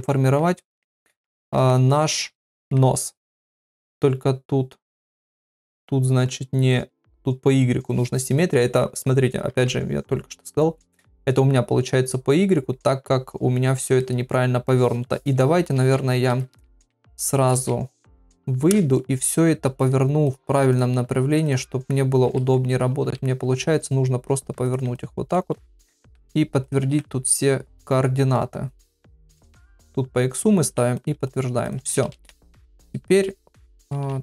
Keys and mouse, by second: 0.1 ctrl+middle click, 0.6 middle click, 1.2 ctrl+middle click, 1.7 shift+middle click, 2.4 ctrl+middle click, 14.0 middle click, 15.7 ctrl+Tab, 16.6 ctrl+Tab, 17.5 ctrl+Tab, 22.2 KP_7, 23.1 r, 25.3 middle click, 26.0 ctrl+a, 26.6 click, 26.8 ctrl+a, 29.5 click, 29.7 click, 30.6 ctrl+a, 32.1 ctrl+Tab, 33.9 ctrl+Tab.